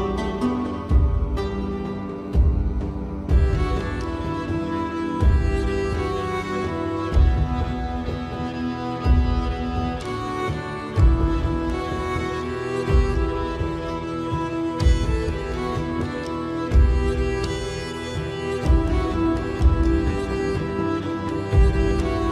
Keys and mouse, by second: 1.9 click, 2.8 click, 5.0 ctrl+1, 6.8 Tab, 7.8 middle click, 9.1 middle click, 11.1 KP_7, 12.4 middle click, 14.3 shift+middle click, 15.6 middle click, 17.1 shift+middle click, 18.4 ctrl+r, 21.2 ctrl+b.